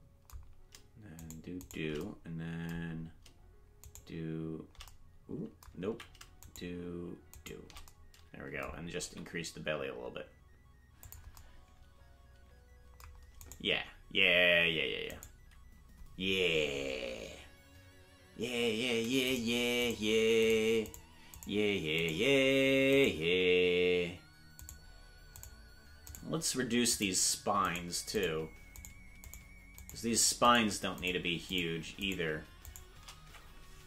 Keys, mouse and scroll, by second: 1.2 shift+right click, 3.8 shift+right click, 5.9 ctrl+z, 6.4-7.9 shift+right drag, 9.0 s, 13.4-33.1 right drag.